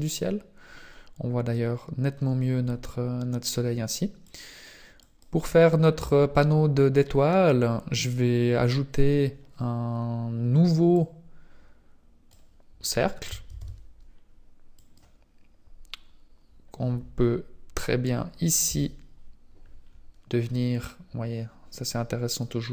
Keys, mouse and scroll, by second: 4.2 click, 10.9 click, 12.8-13.4 scroll down 3, 13.4 shift+a, 15.9 scroll up 4, 18.6 t, 19.8-20.1 scroll down 4, 20.4 scroll up 2, 21.2 scroll up 2, 21.8 click.